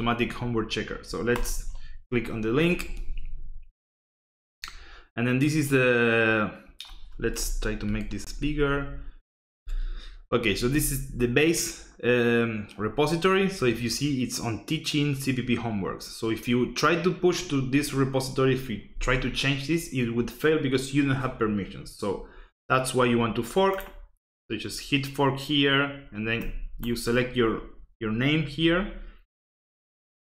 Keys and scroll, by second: 7.9 ctrl+=, 8.4 ctrl+=, 9.4 ctrl+=.